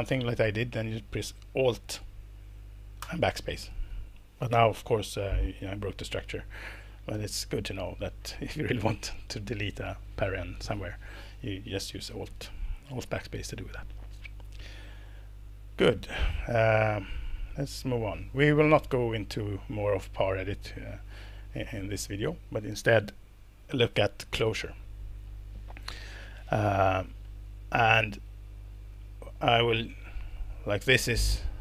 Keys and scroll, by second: 3.0 alt+BackSpace, 7.1 super+z.